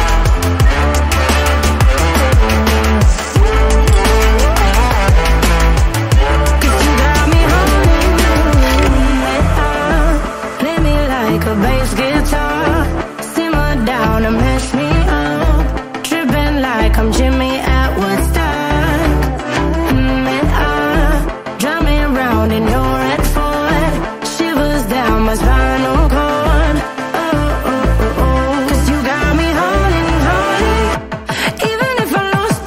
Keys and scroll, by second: 8.8 ctrl+Return, 12.9 ctrl+0, 14.9 v, 28.9 ctrl+t.